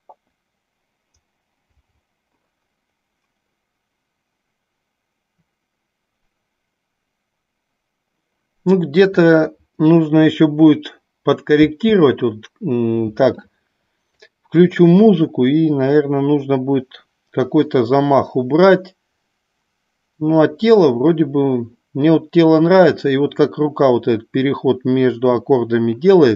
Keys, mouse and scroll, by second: 12.1 space, 15.0-26.3 drag.